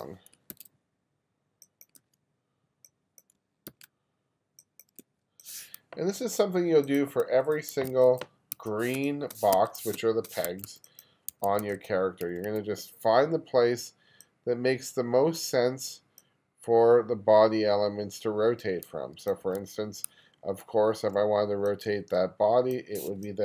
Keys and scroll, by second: 0.5 super+c, 2.0 super+v, 3.7 super+c, 5.1 super+v, 7.5 1, 9.0-12.3 typing, 19.5 1, 21.0 2, 23.2 space.